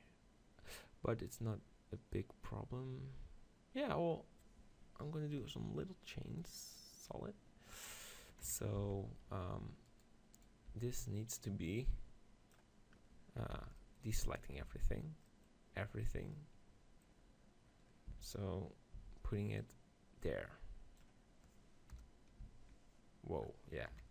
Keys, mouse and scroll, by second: 6.4-8.3 drag, 8.5 KP_7, 8.8 z, 9.4 middle click, 9.9-12.3 right drag, 10.8 b, 13.6 b, 14.7 b, 16.0-19.6 middle drag, 18.2 z, 19.0 z, 19.6-21.3 drag, 22.0 KP_0, 22.5 z, 24.0 KP_7.